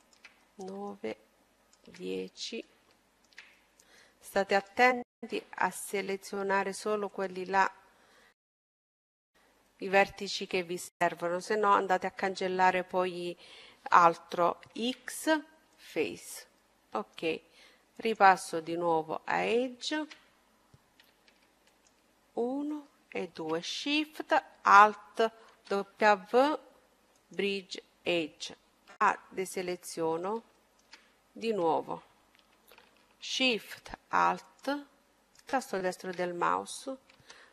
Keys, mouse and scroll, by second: 3.7-5.5 right drag, 5.9-7.8 right drag, 7.7-9.7 middle drag, 12.5 x, 14.5-16.5 middle drag, 16.2-17.8 drag, 17.6-19.5 middle drag, 19.9-22.8 right drag, 24.0 w, 26.2-27.3 middle drag, 27.3 a, 27.9-31.0 middle drag, 32.8-35.7 right drag, 36.5 w.